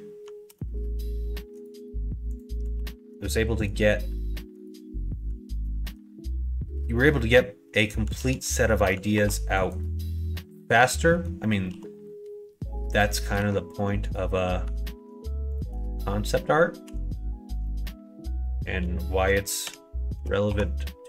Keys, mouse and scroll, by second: 0.4 f, 1.5 right click, 2.3 click, 2.7 ctrl+r, 5.5 ctrl+b, 8.1 ctrl+z, 9.1 ctrl+r, 10.1 middle click, 11.1 middle click, 11.7 KP_1, 13.1 middle click, 14.6 1, 15.9 middle click, 16.8 KP_1, 17.1 KP_3, 17.5 KP_1, 19.6 g.